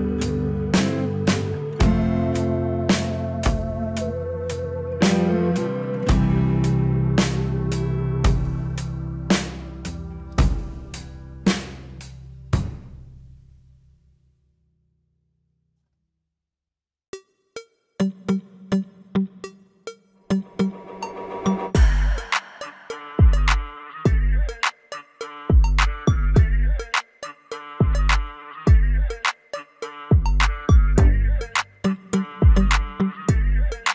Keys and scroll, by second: 5.5 ctrl+z, 22.9 F3, 30.0 F4.